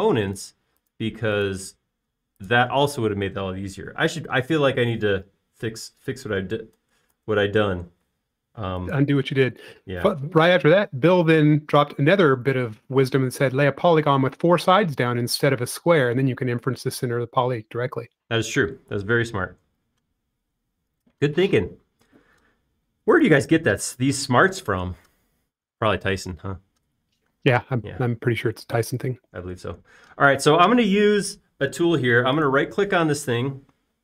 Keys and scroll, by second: 8.0 super+z, 8.2 super+z, 8.6 super+z, 12.1 b, 16.2 space.